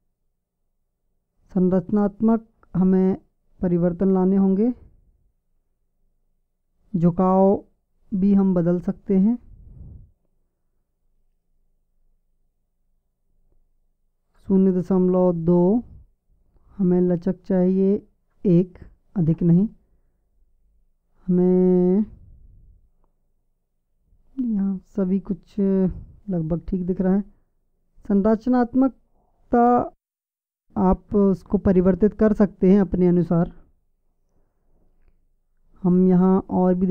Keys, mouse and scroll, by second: 11.7-14.3 drag, 15.9 click.